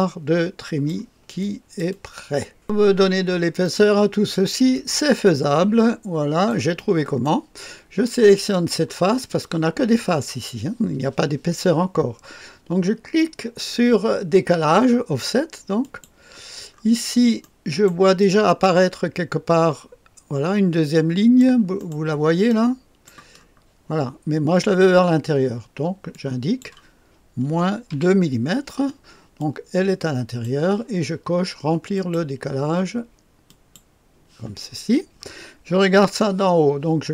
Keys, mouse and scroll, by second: 1.8 click, 2.9-3.6 scroll up 1, 3.6 right click, 4.7-6.5 drag, 6.7 click, 6.7-7.8 right drag, 8.4 click, 15.7 click, 16.6-17.4 scroll up 2, 17.4 right click, 18.1-21.4 drag, 18.1 right click, 21.7 right click, 22.4 click, 23.3-24.6 scroll up 2, 26.0-27.2 drag, 27.4-27.8 typing, 29.3-30.4 drag, 31.9 click, 33.4 click.